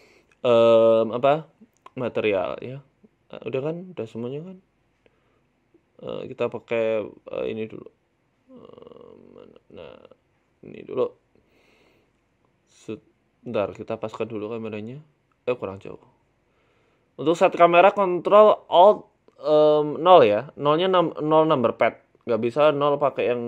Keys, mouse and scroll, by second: 4.1-4.7 scroll down 9, 4.7 shift+a, 5.8 ctrl+z, 6.2 shift+s, 8.5 shift+a, 9.8 s, 10.8 KP_0, 11.4-11.8 scroll down 11, 11.9 scroll up 2, 11.9 scroll down 1, 12.9 middle click, 13.5-13.8 scroll up 4, 14.1 shift+middle click, 16.8 middle click, 17.1-17.6 scroll down 2, 19.0 right click, 19.4 g, 20.9 right click, 21.1 s, 23.2 alt+h.